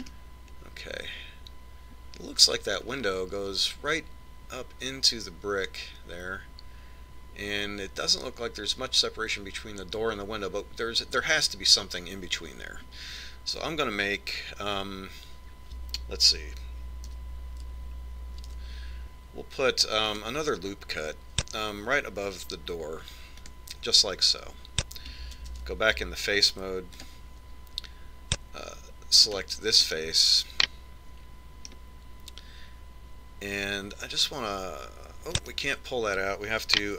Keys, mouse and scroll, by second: 4.1-6.0 scroll down 1, 18.4 a, 19.7 ctrl+r, 26.8 ctrl+Tab, 30.5 right click, 31.2-33.0 middle drag, 35.3 click.